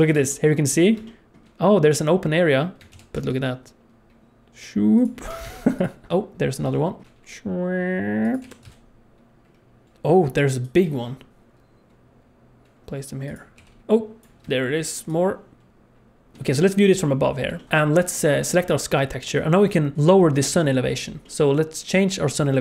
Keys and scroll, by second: 2.9 shift+d, 5.2 r, 8.2 shift+d, 8.4 r, 9.8 alt+a, 9.8 ctrl+s, 11.3 KP_7, 11.3 shift+d, 13.5 r, 15.5 shift+d, 16.3 ctrl+shift+s.